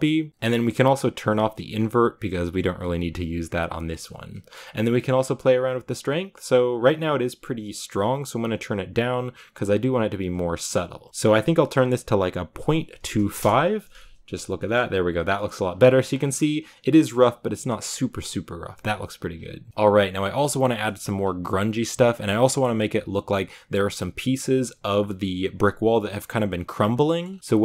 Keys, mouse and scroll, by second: 1.4 drag, 6.8-13.7 drag, 14.4 shift+middle click, 15.4-16.7 scroll up 6, 15.7-16.2 shift+middle drag, 17.1 middle click, 19.0-19.6 scroll down 6, 19.6-20.2 scroll up 1, 20.2-21.0 scroll up 1.